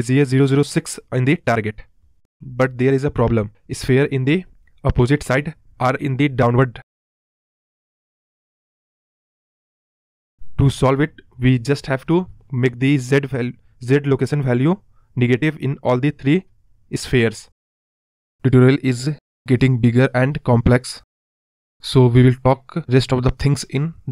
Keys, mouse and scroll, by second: 0.8 scroll down 5, 1.0-2.6 middle drag, 4.7-5.0 scroll up 2, 5.0 scroll down 2, 5.3-6.1 middle drag, 6.1 space, 6.3 scroll down 1, 6.4-6.8 middle drag, 6.8 space, 8.3-8.8 scroll down 6, 8.8 space, 9.1 scroll up 3, 9.3 middle click, 9.4-10.2 scroll down 3, 10.2 middle drag, 10.4 space, 10.4 click, 10.8-11.4 scroll up 1, 11.4 click, 12.9-19.4 drag, 21.2 click, 24.0 click.